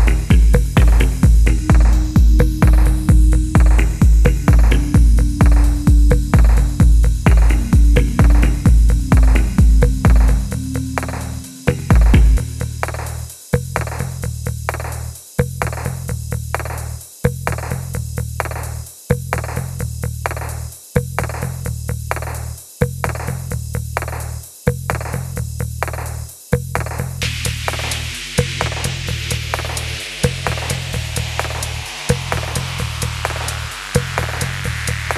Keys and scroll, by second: 0.3 ctrl+f, 0.3 g, 1.0 z, 3.9 ctrl+d, 4.1 Escape, 4.4 ctrl+f, 4.5 g, 6.2 ctrl+f, 6.2 g, 7.0 Tab, 7.8 1, 8.0 3, 8.2 1, 9.0 Tab, 11.0 g, 11.8 g, 13.1 3, 13.7 g, 15.9 2, 16.4 w, 17.9 alt+a, 18.3-20.1 typing, 22.6 ctrl+f, 22.7 g, 23.9 Tab, 24.9 3, 25.4 Tab, 26.0 1, 27.5 w, 27.6 s, 28.3 3, 29.4-32.0 typing, 33.5 ctrl+f, 33.6-35.1 typing.